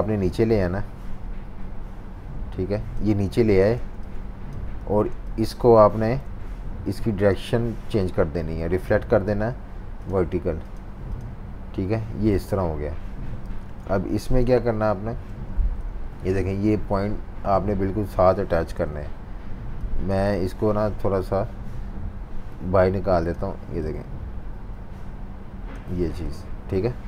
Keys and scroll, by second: 3.8-4.8 typing, 5.7 super+y, 6.2 super+y, 13.5 typing, 14.7 typing, 15.8 super+y, 18.7 super+y.